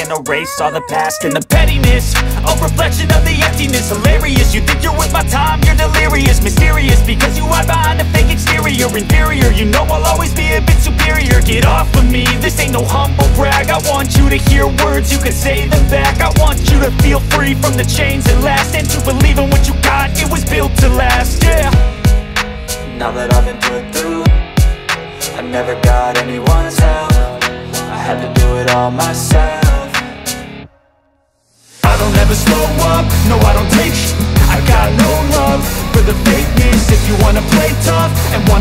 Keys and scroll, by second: 2.5 5, 2.8 ], 5.3 [, 7.4 space, 10.4 space, 18.1-19.4 typing, 22.1 [, 22.8 ], 25.4 ], 27.4 [, 28.7 [, 29.1 ], 33.5 [, 34.4 [, 36.5 [, 37.7 ].